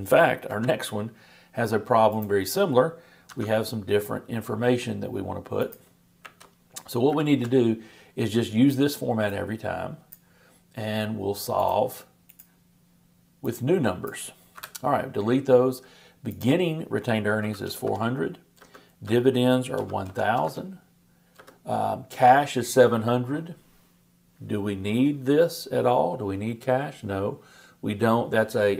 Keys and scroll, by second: 0.5 super+c, 3.3 super+v, 7.1 shift+super+=.